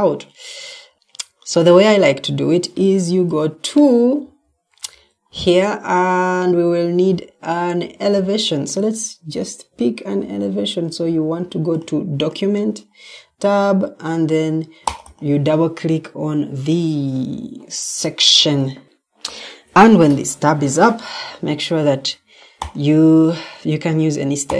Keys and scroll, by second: 0.9 Escape, 4.1 Escape.